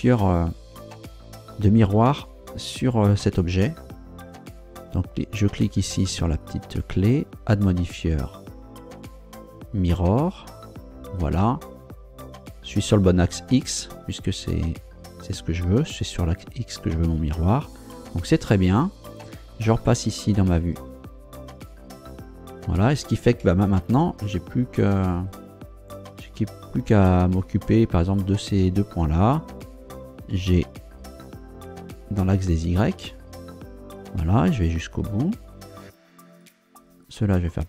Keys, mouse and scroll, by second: 0.7 ctrl+Down, 6.4 click, 7.3 click, 10.5 click, 20.6 ctrl+Down, 22.4 scroll up 2, 23.3 Tab, 27.3 right click, 28.0 shift+right click, 30.3 g, 33.0 y, 35.4 click, 36.4 right click, 37.0 shift+right click.